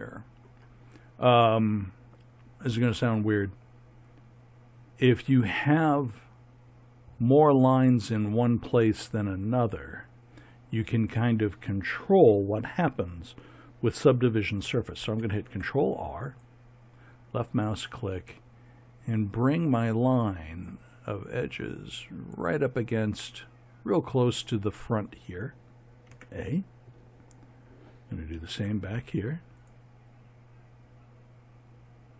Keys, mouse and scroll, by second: 15.2 ctrl+r, 26.1 a, 28.3 ctrl+r.